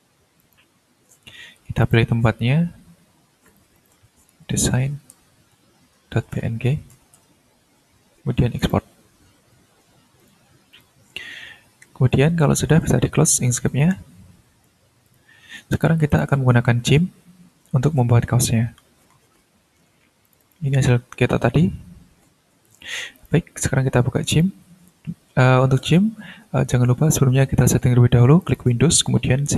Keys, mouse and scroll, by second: 0.4 click, 1.8 click, 3.5 click, 4.0-7.5 typing, 8.6 click, 10.2 click, 10.7 click, 11.9 ctrl+s, 13.7 click, 15.0 click, 15.7 click, 16.1 click, 20.2 click, 21.8-22.7 scroll down 1, 22.7 click, 23.1 click, 24.3 click, 28.4 click.